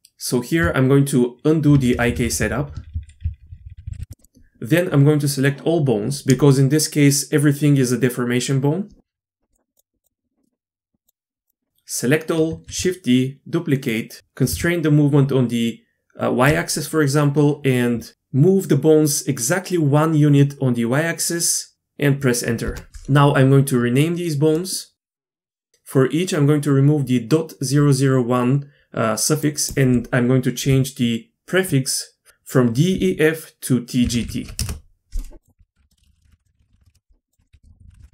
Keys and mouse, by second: 0.0 Tab, 1.8-2.6 ctrl+z, 2.8 ctrl+z, 3.0-3.5 ctrl+z, 10.4 middle click, 11.0 click, 11.7 shift+a, 12.5 shift+d, 24.6 middle click, 24.9 F2, 35.8 F2, 35.8 BackSpace, 36.0 Left, 36.0 BackSpace, 36.2 Left, 36.7 shift+Left, 36.9 shift+Left, 37.3 click, 37.4 F2, 37.6 BackSpace, 37.8 Left, 37.8 BackSpace.